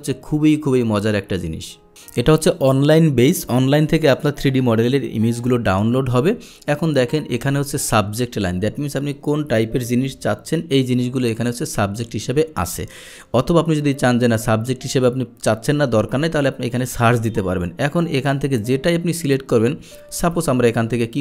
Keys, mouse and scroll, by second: 10.8 scroll down 1, 11.3 middle drag, 12.7-13.0 scroll up 2, 12.8 middle click, 13.4-13.8 middle drag, 18.2 middle click, 18.5 scroll down 1, 18.6 middle click, 19.1 middle click, 20.8 middle click.